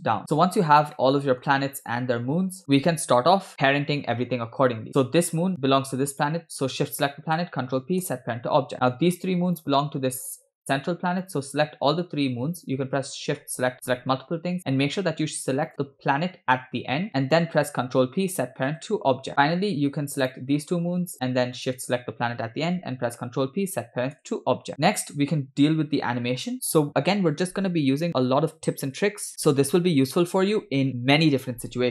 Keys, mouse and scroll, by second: 0.2 Tab, 0.2-0.8 scroll down 4, 1.0-1.4 shift+middle drag, 1.8 scroll down 2, 2.6 shift+middle click, 4.6 scroll up 3, 4.9 click, 6.1 shift+click, 7.4 ctrl+p, 8.7 scroll down 2, 8.9 shift+middle click, 9.1 scroll up 2, 9.6 click, 10.6 shift+click, 11.4 click, 15.8 shift+click, 17.1 shift+click, 17.9 ctrl+p, 19.4 shift+middle click, 20.4 click, 21.2 shift+click, 21.7 click, 23.3 ctrl+p, 24.7 shift+middle click, 24.7 scroll down 2.